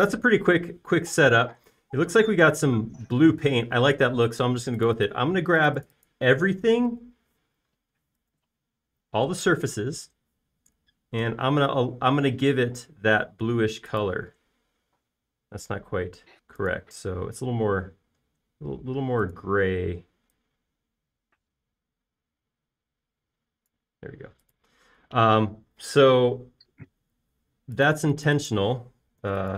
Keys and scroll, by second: 8.3 f, 9.3 super+a, 10.2 space, 10.8 super+a, 12.2 b, 27.3 space.